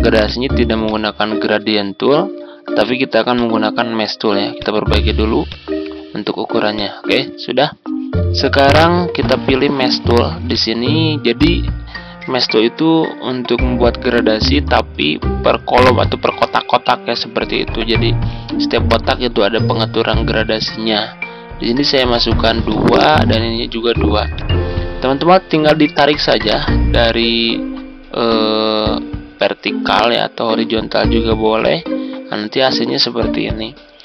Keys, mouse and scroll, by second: 0.2 click, 3.3-34.0 drag.